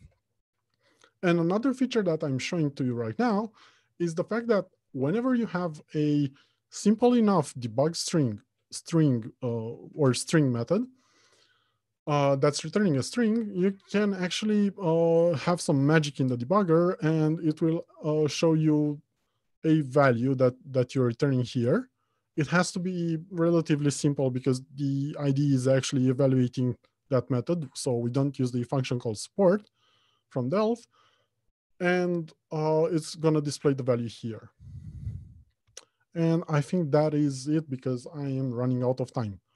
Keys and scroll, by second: 36.6 ctrl+F2.